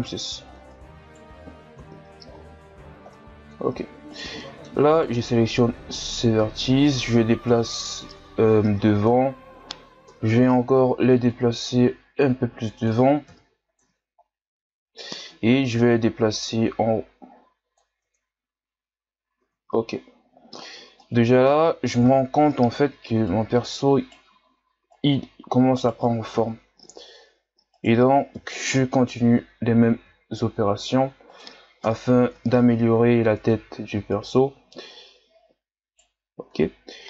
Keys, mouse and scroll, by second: 0.7 right click, 1.8 KP_3, 3.1-4.1 middle drag, 4.1 right click, 4.4 middle click, 4.9 shift+right click, 5.2 middle click, 5.9-7.5 drag, 7.5 KP_1, 8.1 Tab, 9.1 Tab, 10.1 KP_3, 11.3-13.3 drag, 13.3 KP_1, 13.8 Tab, 14.2-14.8 scroll down 2, 14.8 scroll up 2, 15.1 Tab, 15.8-18.0 drag, 18.0 Tab, 18.4-19.0 scroll down 1, 19.0-19.4 scroll up 4, 19.4 Tab, 19.9-20.5 scroll down 1, 20.5-21.0 scroll down 2, 21.0-22.0 middle drag, 22.0 KP_3, 23.3 right click, 24.9 right click, 26.4 KP_1, 27.8 right click, 28.3 KP_3, 30.0 g, 31.8 KP_1, 32.4 Tab, 33.0-33.4 scroll up 2, 33.4 Tab, 34.1 right click, 36.3 scroll down 1, 36.5 Tab.